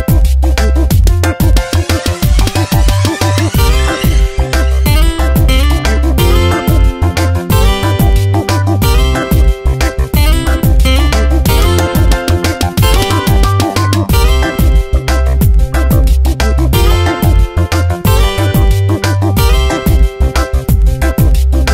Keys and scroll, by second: 3.3 b.